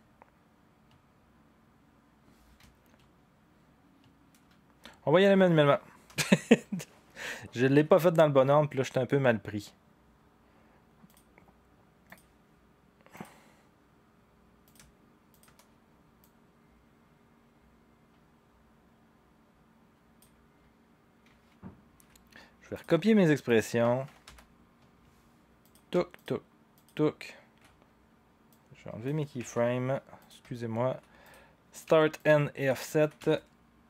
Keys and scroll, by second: 24.2 u, 29.4 Delete.